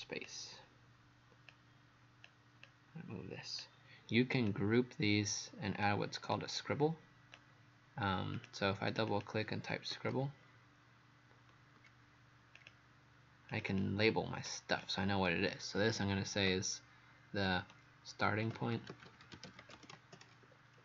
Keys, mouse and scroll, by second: 8.9 click, 9.7-10.6 typing, 11.8 r, 12.6 click, 13.7 click, 14.5 click, 18.2-20.8 typing.